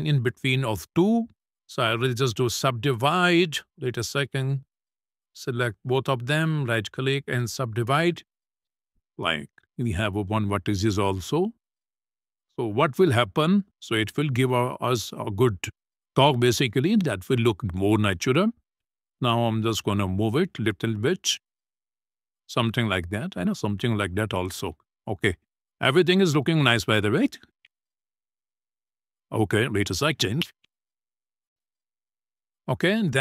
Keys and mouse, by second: 1.0-2.0 right drag, 4.1 ctrl+z, 4.7 click, 5.6 shift+click, 6.2-7.3 right drag, 8.1 click, 8.4 middle click, 9.7 click, 12.5 click, 13.6 middle click, 14.9 shift+middle click, 16.5 shift+middle click, 18.8 shift+middle click, 19.3 click, 19.9 click, 20.5 right click, 21.0 click, 22.8-23.8 drag, 24.5 click, 25.0 click, 25.3 click, 25.9-27.2 drag, 33.0 shift+middle click.